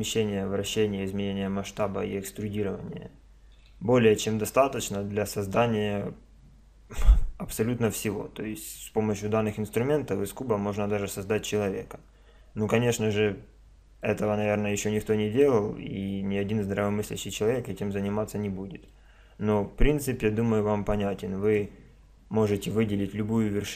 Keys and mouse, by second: 3.6 a, 8.8-10.7 middle drag, 14.0-16.0 middle drag, 18.9-23.7 middle drag.